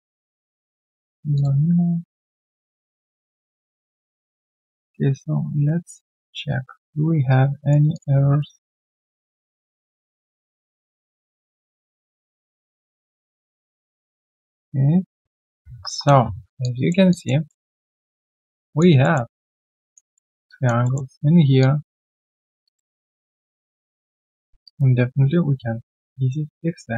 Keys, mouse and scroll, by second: 3.4-4.8 scroll down 1, 7.3 right click, 10.0 scroll up 1, 13.4 double click, 16.6 alt+click, 17.4 alt+middle click, 17.7 alt+click, 18.0 alt+right click, 18.3 alt+click, 19.0 alt+middle click, 19.3 alt+click, 19.6 alt+right click, 19.8 alt+click, 20.1 alt+middle click, 20.4 alt+click, 20.8 alt+middle click, 21.6 alt+click, 22.9 alt+middle click, 23.2 alt+click, 23.5 alt+middle click, 23.8 alt+right click, 24.0 alt+click, 24.4 q.